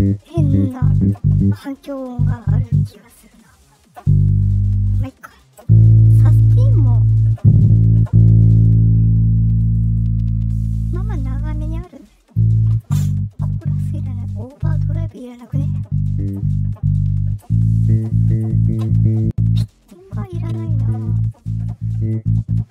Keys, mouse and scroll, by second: 14.8 click, 19.4 click, 21.0-22.7 drag.